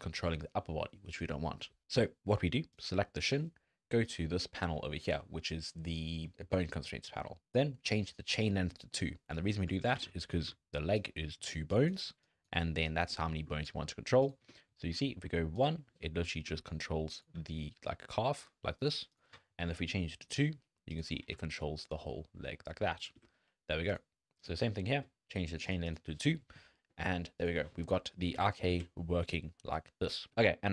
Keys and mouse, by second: 2.7 click, 4.1 click, 8.9 click, 9.7 click, 9.9 alt+a, 10.5 d, 10.9 click, 11.5-14.4 typing, 11.7 click, 12.2 click, 12.9 click, 14.3 click, 15.6 click, 15.9 z, 16.3 click, 16.5 z, 17.1 click, 17.4 g, 20.3 click, 20.9 click, 21.3 g, 23.1 z, 24.4-25.7 drag, 25.8 click, 26.7 drag, 28.3 g, 30.3 click.